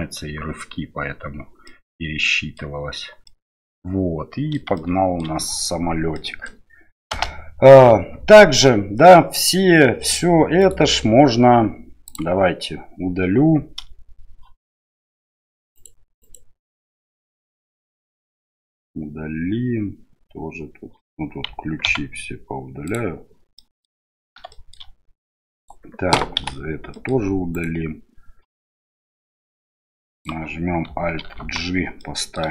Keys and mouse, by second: 1.7 middle click, 3.2-4.6 middle drag, 4.7 shift+middle click, 6.1 middle click, 7.1 space, 10.6-12.1 right drag, 15.7 right click, 16.2 right click, 21.8 x, 23.6 middle click, 24.5 shift+middle click, 25.6 right click, 26.4 Delete, 26.9 middle click, 27.5 right click, 29.0-30.3 drag, 31.4 alt+g, 32.0 middle click.